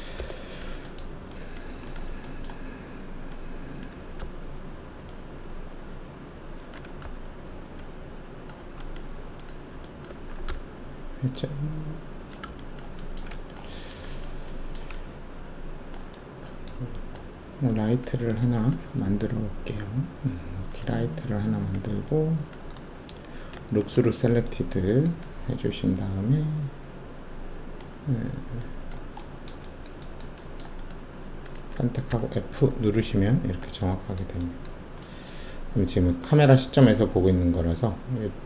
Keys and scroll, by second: 0.1 5, 4.2 e, 7.0 w, 10.4 alt+e, 23.5 alt+shift+z, 32.0 alt+f.